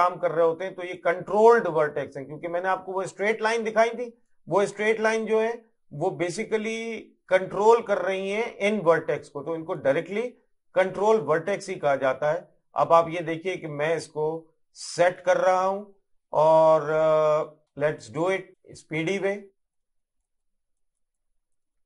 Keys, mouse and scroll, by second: 1.9 middle click, 3.2 middle click, 4.4 click, 6.8 middle click, 8.1 click, 10.1 middle click, 11.9 click, 13.9 middle click, 15.1 click, 16.6 middle click, 17.7 click, 18.4 middle click, 18.5 click, 19.8 middle click, 20.4 click, 21.6 middle click.